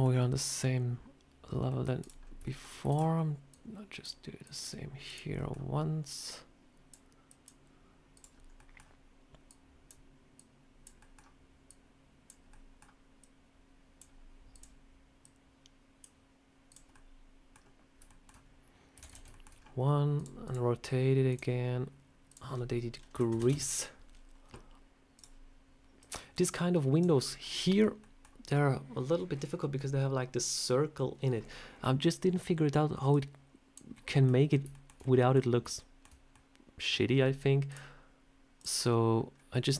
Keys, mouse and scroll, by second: 1.6 middle click, 1.9 click, 2.1 scroll up 1, 2.3 shift+middle click, 2.5 shift+scroll down 1, 2.8 shift+d, 3.4 click, 4.3 click, 4.9 click, 5.2 middle click, 6.0 click, 7.1 click, 8.0 click, 8.3 scroll up 1, 8.4 middle click, 9.3 click, 10.2 click, 10.9 middle click, 11.5 click, 12.4 middle click, 13.1 click, 14.4 click, 15.1 click, 16.6 click, 16.8 middle click, 17.9 shift+middle click, 18.9 shift+d, 19.2 shift+middle click, 19.4 scroll down 3, 20.0 click, 20.3 click, 21.2 click, 22.2 click, 25.0 click, 25.9 click, 31.7 middle click, 33.0 click, 33.8 middle click, 34.4 scroll up 3, 34.6 shift+middle click, 34.9 middle click, 35.6 shift+middle click, 36.2 middle click, 37.6 click.